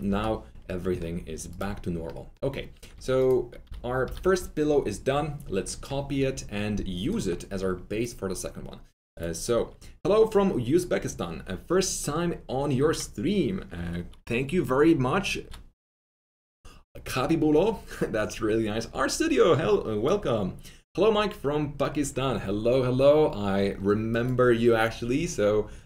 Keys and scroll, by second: 0.0-0.5 typing, 2.8 F3, 3.6-4.5 typing.